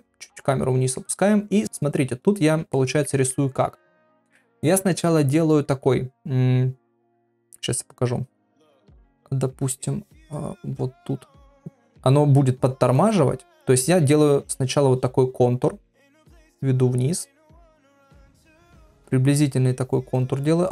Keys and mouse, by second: 2.8 ctrl+middle click, 3.3 shift+middle click, 11.1-13.7 drag, 14.9-17.9 drag, 18.3 shift+middle click, 19.9-20.7 drag.